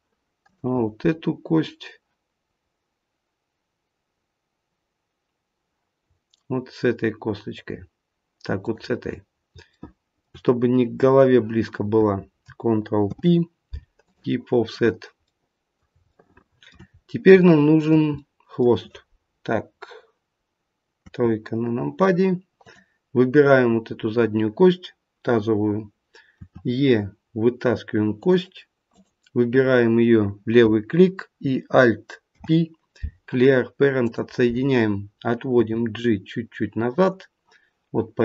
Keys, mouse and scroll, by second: 0.4 click, 2.4-2.8 scroll down 2, 8.5 shift+click, 9.7 shift+middle click, 10.6-11.1 scroll up 2, 13.0 ctrl+p, 14.7-15.4 scroll down 3, 15.2 middle click, 16.0 shift+middle click, 16.9 scroll up 2, 17.3 shift+middle click, 18.1 middle click, 20.9 KP_3, 22.6 click, 26.3 e, 28.8 click, 32.2 alt+p, 35.6 g.